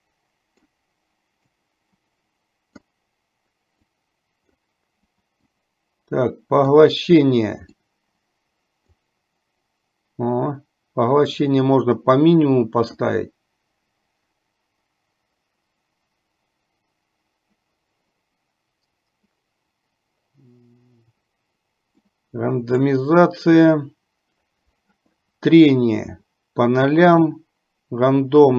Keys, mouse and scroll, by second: 1.8-3.0 drag, 4.2 click, 5.8-7.0 drag, 8.0-9.3 drag, 11.7-13.3 drag, 22.3 click.